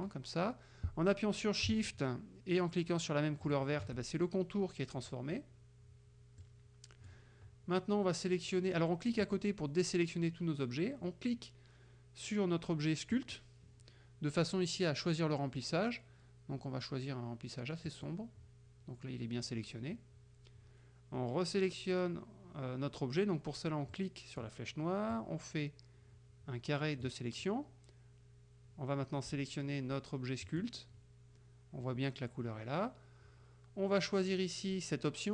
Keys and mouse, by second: 6.5 click, 9.3 click, 13.2 click, 18.0 click, 24.0 click, 25.2-27.3 drag, 30.5 click.